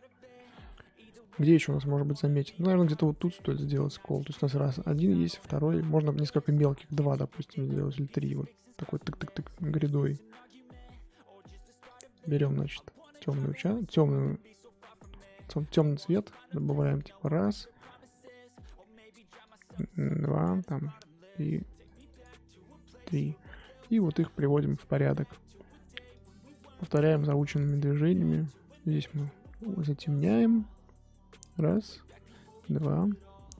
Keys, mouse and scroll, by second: 0.1 scroll up 2, 0.3-2.5 middle drag, 2.5 scroll up 2, 3.5 middle click, 3.9 scroll down 1, 4.1-7.7 middle drag, 7.7 click, 8.2 middle click, 8.4-9.6 scroll up 3, 9.6-9.9 scroll up 2, 11.6 click, 11.9 click, 12.2 click, 14.3 f, 15.1 scroll down 2, 15.1 middle click, 16.0 f, 16.9-18.3 drag, 18.3-19.0 scroll up 1, 19.0 f, 20.0-23.2 drag, 23.2-26.2 scroll up 1, 26.2 click, 27.6 click, 28.7-33.5 drag.